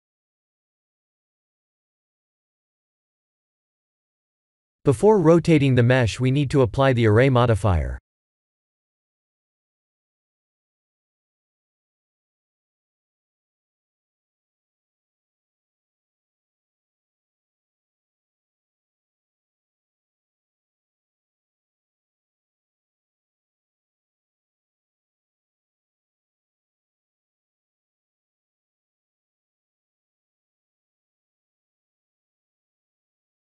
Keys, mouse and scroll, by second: 0.2 click, 0.7 click, 1.8 click, 2.1 middle click, 2.9 click, 4.2 b, 6.1 KP_1, 6.8 r, 8.1 ctrl+z, 9.7 click, 11.1 click, 13.2 click, 14.8 click, 15.6 ctrl+a, 17.1 click, 17.5 b, 18.8 r, 24.5 g, 28.3 middle click, 29.3 middle click, 30.1 scroll down 3, 31.1 KP_7, 32.1 shift+d.